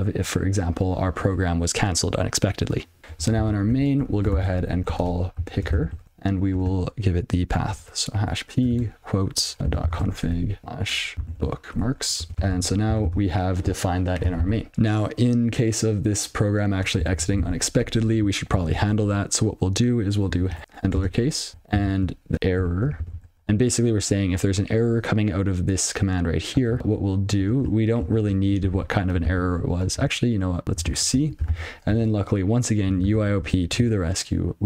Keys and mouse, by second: 1.2 click, 3.0 ctrl+n, 4.8 ctrl+alt+k, 5.1-6.5 typing, 8.2-11.8 typing, 12.2 ctrl+f, 12.3 ctrl+f, 12.4 Tab, 12.5 ctrl+s, 13.0 ctrl+c, 14.7 ctrl+s, 17.9 ctrl+n, 18.5 Tab, 18.7 (, 20.2-21.1 typing, 21.9 alt+j, 22.4 (, 22.8 r, 23.3 space, 26.6 click, 28.5 (, 29.1 ctrl+f, 29.7 alt+j, 30.4 ctrl+/, 30.6 ctrl+b, 32.4-34.3 typing.